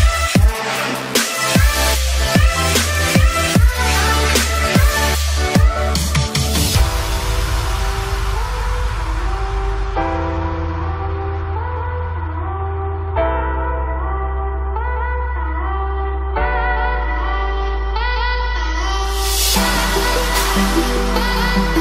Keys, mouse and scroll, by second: 8.4 Down, 10.8 Down, 12.4 click, 20.5-21.8 drag.